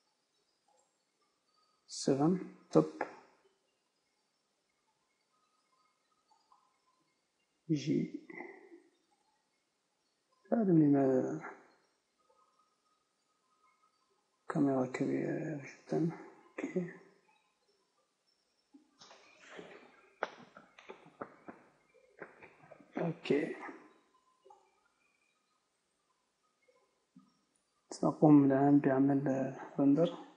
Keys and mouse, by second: 1.1-2.7 drag, 2.1 KP_7, 3.1 click, 3.4 click, 4.1 r, 6.8-8.3 drag, 7.7 g, 9.5-10.9 drag, 10.9-11.9 right drag, 11.9 click, 11.9 g, 12.2 s, 16.1-17.6 drag, 16.8 KP_0, 17.7-19.1 drag, 19.1-23.1 typing, 24.3 KP_0, 25.9 click, 26.3 z.